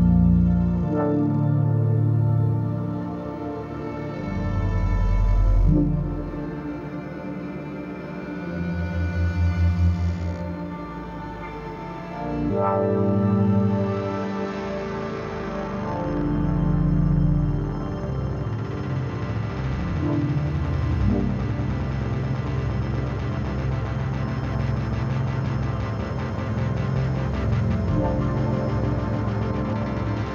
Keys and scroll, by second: 6.2 space, 19.3 ctrl+s, 24.6 ctrl+i, 28.7 ctrl+z.